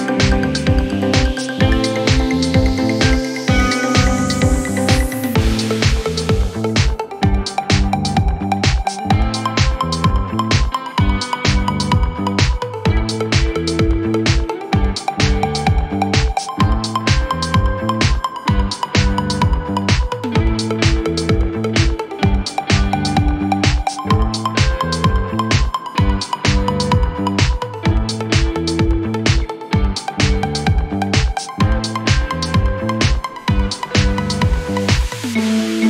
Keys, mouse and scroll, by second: 3.1 scroll down 6, 3.3 z, 3.8 Tab, 4.1 click, 4.2 scroll down 2, 4.3 middle click, 4.7-5.1 scroll up 3, 5.1 KP_1, 5.3 scroll up 2, 6.1 click, 6.4 z, 6.6 scroll up 2, 7.2 Tab, 7.7 shift+middle click, 8.1-8.4 scroll up 1, 8.4 e, 8.9 g, 12.2 shift+middle click, 12.6 e, 13.2 g, 16.1 shift+middle click, 16.6-17.1 scroll down 1, 17.1 g, 19.6 e, 20.3 g, 23.1 r, 24.6 ctrl+z, 25.6 g, 26.3 r, 27.2 s, 30.1 shift+middle click, 30.5 scroll down 2, 30.8 e, 31.5 g, 32.5 r, 34.0 s.